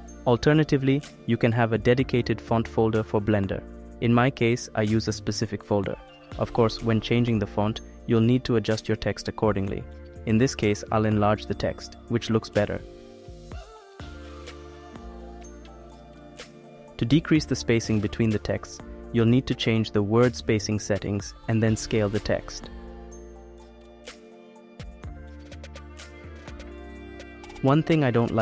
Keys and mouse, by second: 7.2 click, 9.9 s, 12.5 click, 13.4 click, 14.7 s, 17.0 s, 21.8 click, 22.3 click, 22.5 click, 23.0 click, 23.7 s, 27.6-28.4 drag.